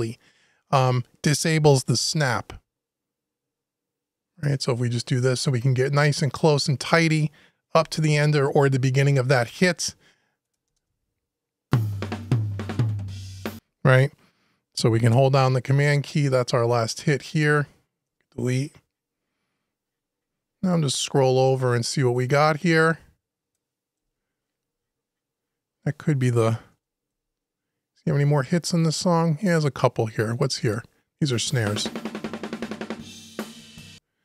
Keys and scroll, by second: 7.5 super+Delete, 17.8 super+Delete, 23.8 Delete.